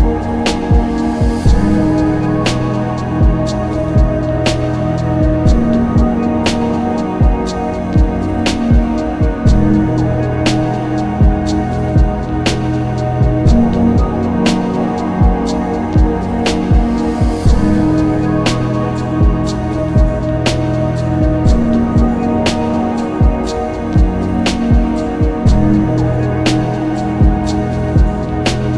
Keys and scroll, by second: 1.0 ctrl+z, 2.6 ctrl+z, 5.5 ctrl+z, 13.0 s, 25.8-27.6 typing.